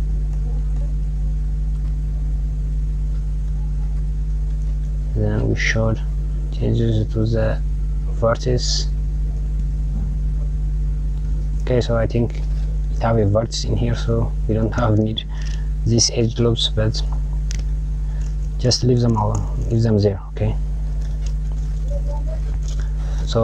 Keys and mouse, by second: 1.6 click, 2.6 click, 4.5 click, 5.2 click, 7.9 click, 9.2 click, 15.8 KP_Add, 17.3 click, 22.1 click.